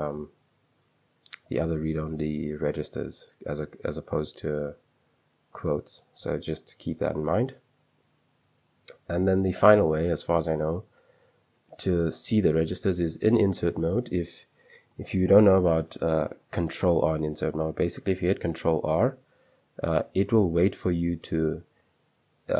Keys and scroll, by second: 2.9 Escape, 3.6 ", 7.2 Escape, 9.8 j, 12.0 i, 14.1-14.9 typing, 18.8 ctrl+r.